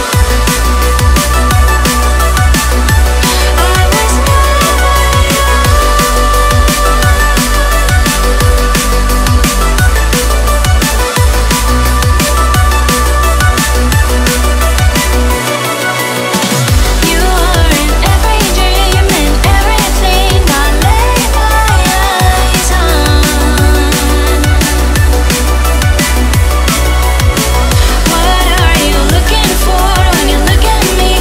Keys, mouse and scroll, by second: 2.0 click, 2.8-3.4 scroll up 2, 4.7 click, 5.7 click, 7.2 click, 7.9 click, 8.2-8.7 scroll down 3, 9.4 click, 12.2 click, 14.9-15.3 scroll down 1, 16.7 click, 19.7 0, 22.2 click, 24.9 click, 27.2 click, 30.3 click.